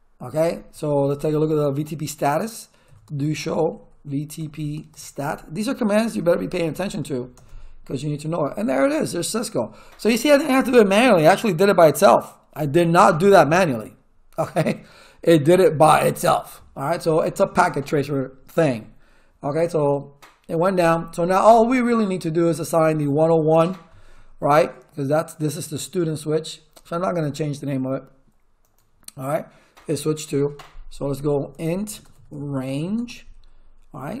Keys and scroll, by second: 2.6-7.1 typing, 7.3 Return, 31.2-33.3 typing.